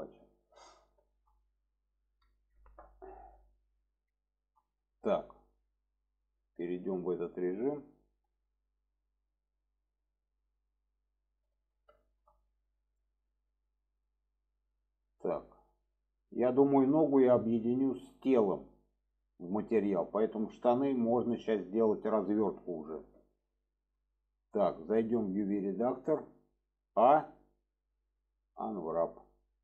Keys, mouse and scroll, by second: 0.9 shift+middle click, 2.4 shift+middle click, 4.1-4.4 shift+middle drag, 6.2 click, 6.8 shift+middle click, 9.0-11.7 middle drag, 12.0 shift+middle drag, 13.0 shift+middle drag, 14.8 shift+middle drag, 17.8 shift+middle drag, 19.7 shift+middle drag, 20.6 click, 22.0 shift+middle click, 22.7 shift+middle drag, 23.7 shift+middle drag.